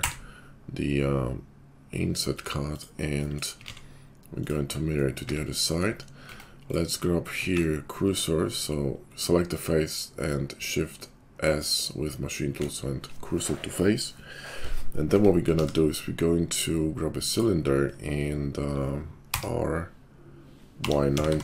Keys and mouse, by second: 3.6 alt+x, 4.4 click, 4.7-5.9 middle drag, 5.2 `, 5.9 shift+click, 6.0 middle click, 6.3 Tab, 6.6 click, 6.7 middle click, 7.3-12.6 shift+drag, 7.5 shift+s, 12.6-15.0 middle drag, 15.0 Tab, 15.6 shift+a, 19.2 r.